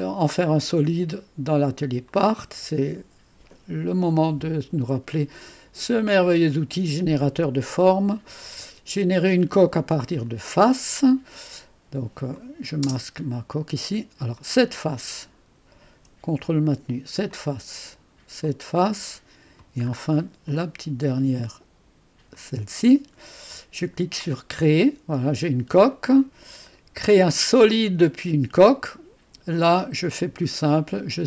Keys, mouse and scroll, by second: 0.0 click, 2.1 click, 7.8 click, 10.3 click, 12.4 click, 14.4-15.8 drag, 16.9-18.4 drag, 18.7 click, 19.6 click, 19.9-20.6 scroll up 1, 20.6-21.9 right drag, 22.4 click, 24.5 click, 27.6 click, 29.6 click, 30.4-31.2 scroll down 2.